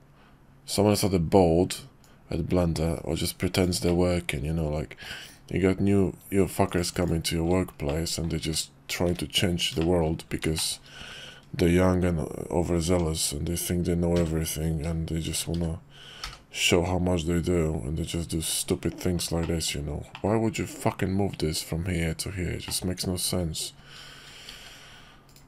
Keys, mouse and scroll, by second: 2.0-7.1 drag, 7.9-8.3 middle drag, 9.1 `, 9.8 shift+click, 10.6 shift+click, 12.9 Tab, 14.1 a, 15.3 shift+d, 18.7 Tab, 19.4 middle click, 20.1 middle click, 22.7 middle click, 24.5 alt+x.